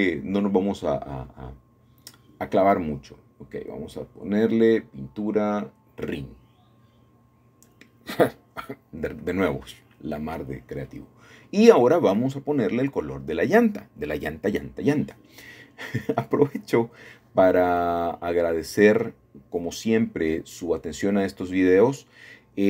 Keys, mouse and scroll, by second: 1.5 click, 1.7 click, 3.1-7.9 typing, 10.2 click, 11.8 click, 14.6 middle click, 15.7 middle click, 16.0 middle click, 17.1-18.2 drag, 18.9-20.3 scroll down 1, 20.3 scroll up 2, 20.8 scroll down 2, 21.4-21.8 scroll down 3.